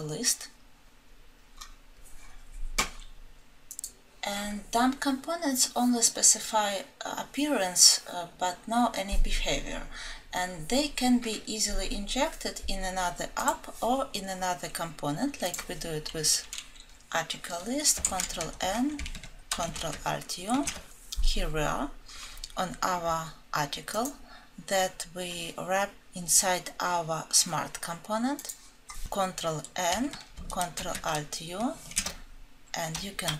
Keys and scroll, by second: 18.0 alt+Home, 19.8 ctrl+alt+F7, 29.0 alt+Home, 30.7 ctrl+alt+F7.